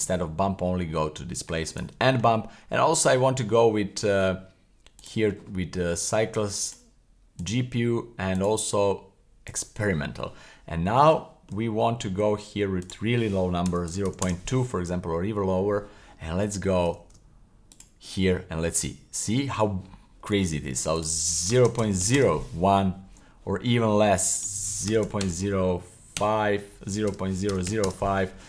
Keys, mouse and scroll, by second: 2.1-3.4 scroll up 20, 5.0 click, 6.6-7.5 drag, 8.3-9.6 drag, 10.8 scroll up 2, 11.2 shift+scroll down 1, 11.2 shift+middle click, 11.7 scroll up 2, 12.8-14.2 drag, 17.1 super+s, 17.7 click, 19.0-19.9 scroll up 1, 20.9-22.2 drag, 24.3-27.9 drag.